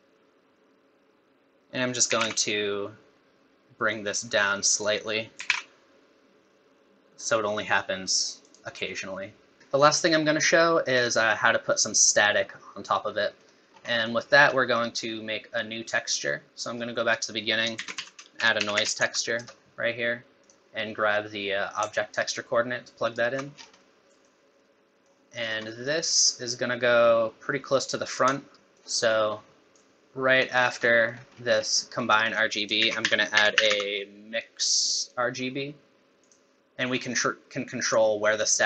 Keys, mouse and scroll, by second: 13.1 middle click, 13.7 scroll down 3, 13.9 middle click, 14.3 scroll up 3, 14.6 middle click, 17.1 click, 17.8 shift+a, 22.2 alt+right click, 23.5 scroll down 6, 23.8 middle click, 24.6 middle click, 25.4 scroll down 1, 25.7 middle click, 26.5 click, 28.5 middle click, 28.5 scroll up 5, 28.5 g, 28.7 middle click, 29.7 click, 30.6 scroll up 2, 30.8 middle click, 31.1 scroll down 1, 31.2-31.8 scroll up 5, 31.8 middle click, 32.2 click, 32.8 shift+a, 36.6 middle click, 36.6 click.